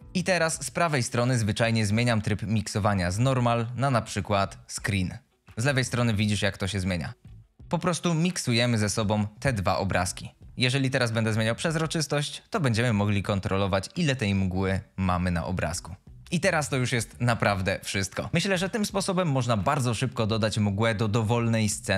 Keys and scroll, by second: 10.5 F22.